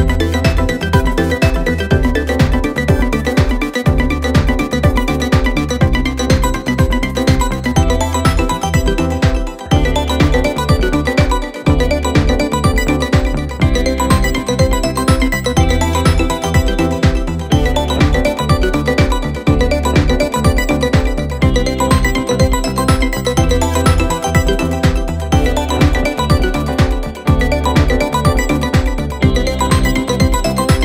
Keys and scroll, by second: 28.1-29.0 typing.